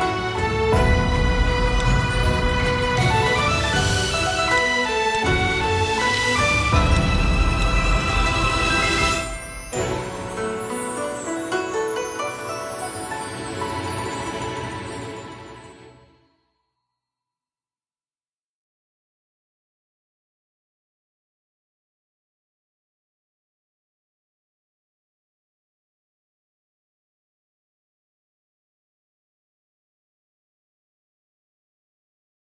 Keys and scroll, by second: 5.4 v, 12.8 space.